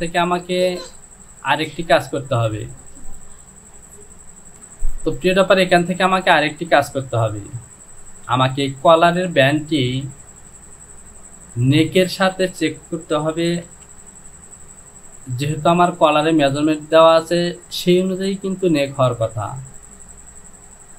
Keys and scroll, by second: 13.8 Return.